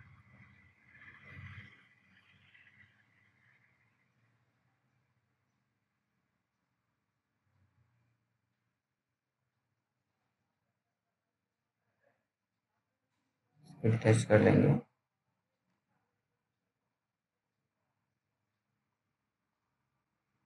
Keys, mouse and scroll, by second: 0.4 click, 3.9-4.5 scroll up 1, 4.5 right click, 5.2 click, 5.7 scroll down 1, 6.1 alt+middle click, 7.5 F3, 9.9 click, 16.7-19.4 scroll down 1.